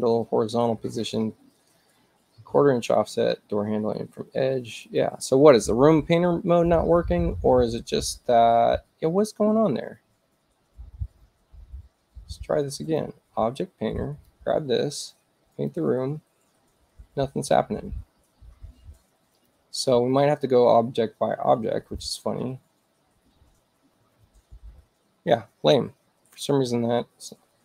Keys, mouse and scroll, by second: 4.8 click, 12.8 click, 13.9 click, 15.5 click, 19.4 click, 21.8 click.